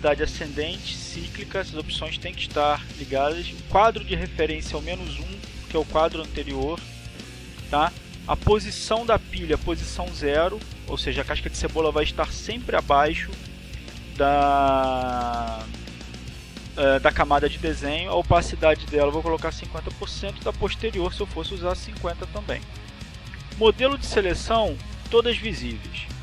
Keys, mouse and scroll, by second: 0.0 click, 1.7 click, 3.8 -, 4.3 1, 5.5 click, 16.9 click, 18.0 5, 18.4 0, 19.1 click, 20.0 5, 20.3 0, 23.2-24.9 drag.